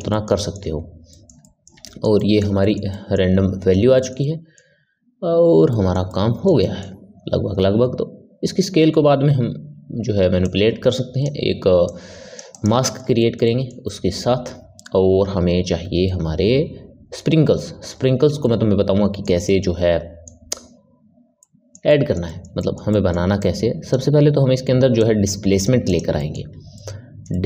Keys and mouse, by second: 10.4-11.9 drag, 12.4 click, 12.7-16.5 middle drag, 17.1-23.3 middle drag, 23.3-25.0 drag, 25.8 click, 26.1-27.4 middle drag.